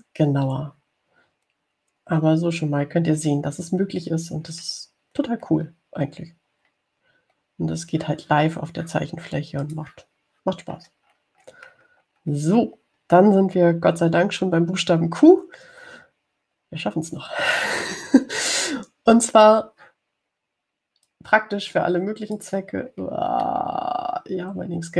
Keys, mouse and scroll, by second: 0.8 click, 5.5-6.0 scroll down 1, 6.4-7.2 scroll up 2, 7.9-8.3 scroll down 2, 8.5-8.9 scroll up 2, 10.9 click, 12.0-13.5 scroll down 2, 22.3-23.8 drag, 24.1-24.5 scroll down 1.